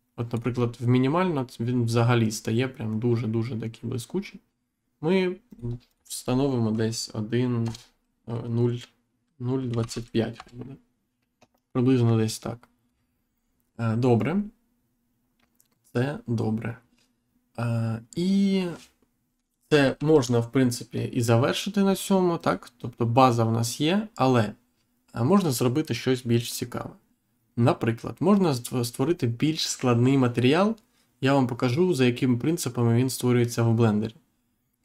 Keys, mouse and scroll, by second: 5.4 click, 7.6 BackSpace, 9.7 typing, 10.3 Return, 19.9 ctrl+s, 22.3 click.